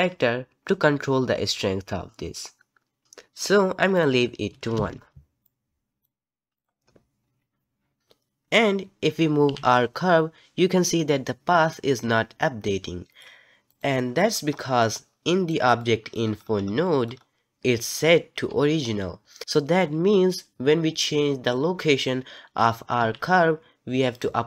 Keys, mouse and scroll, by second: 3.0 click, 3.9-5.9 drag, 6.5 click, 9.5 g, 13.7 click, 14.5 scroll down 5, 14.8-16.3 middle drag, 16.3-19.4 scroll up 6, 16.8 middle click, 21.4 click, 23.0 g.